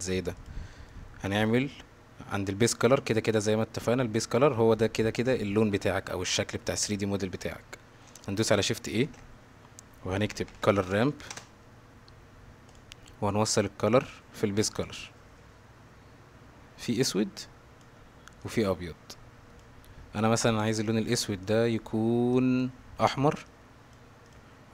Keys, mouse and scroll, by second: 9.1 shift+a, 13.9-14.9 drag, 16.8-17.8 drag, 18.4-19.6 drag, 20.5 click, 21.4 click, 24.2 click.